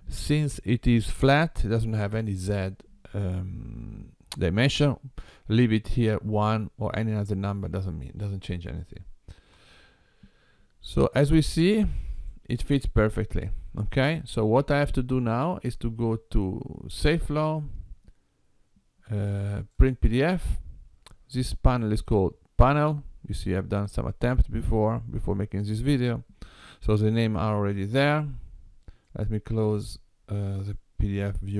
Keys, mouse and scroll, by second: 17.0 click, 19.7 click.